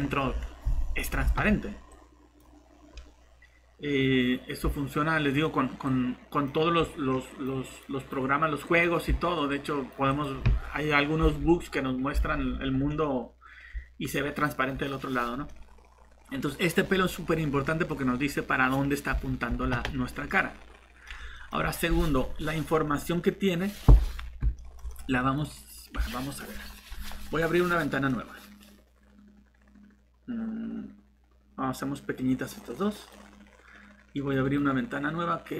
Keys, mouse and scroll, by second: 0.0-0.4 typing, 1.7 typing, 5.1 typing, 11.4 alt+Tab, 12.2 alt+Tab, 15.5 middle click, 16.5 scroll up 1, 17.1 middle click, 17.9 scroll down 1, 20.3 middle click, 23.9 scroll down 1, 24.5 middle click, 32.2 click, 34.4 right click.